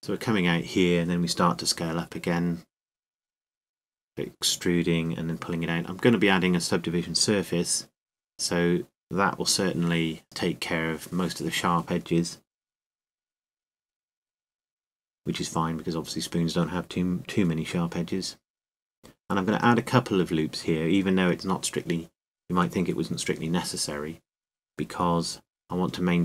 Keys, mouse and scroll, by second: 4.3 e, 10.5 s, 10.5-12.9 drag, 15.2 e, 17.3 click, 17.3 s, 18.3 click, 25.9 shift+e.